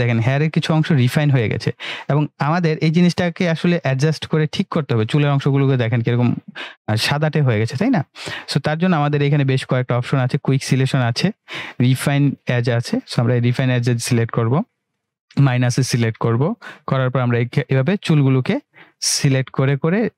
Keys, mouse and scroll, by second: 12.9-18.0 drag.